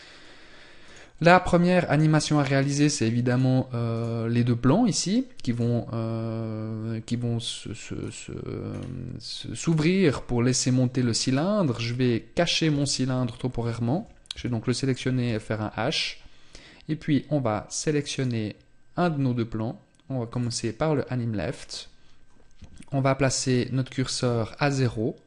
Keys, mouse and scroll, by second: 0.3 right click, 2.7 right click, 3.4 right click, 7.5-8.1 scroll down 2, 8.2 scroll down 2, 21.0-21.3 scroll up 4, 24.9-25.2 click.